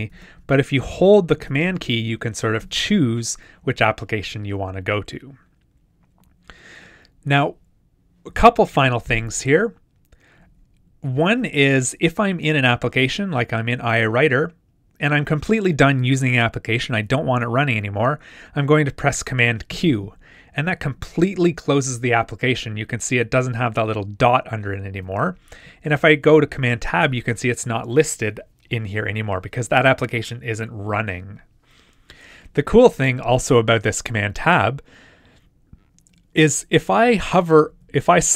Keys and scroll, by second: 0.1 super+Tab, 1.4 super+Tab, 19.7 super+q, 26.0 super+Tab, 37.1 super+Tab.